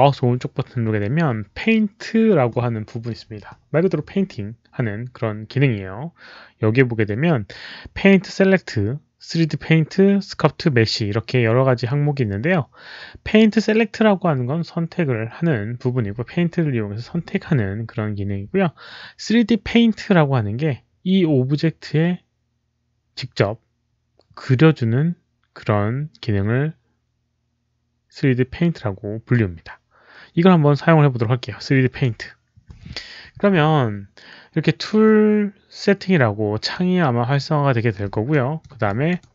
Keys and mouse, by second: 1.9 alt+click, 1.9 alt+middle click, 36.6-37.3 drag, 38.2 alt+middle click, 38.8 alt+click, 39.1 alt+right click.